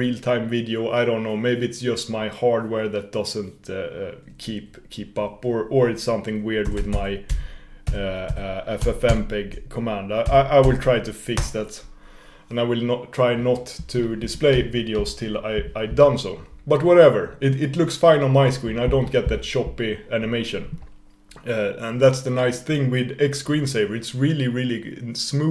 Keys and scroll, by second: 14.9 super+x.